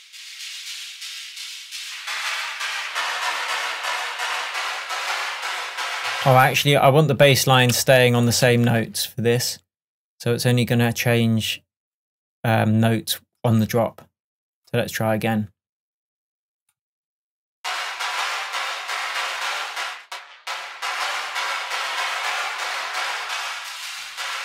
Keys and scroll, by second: 6.2 space.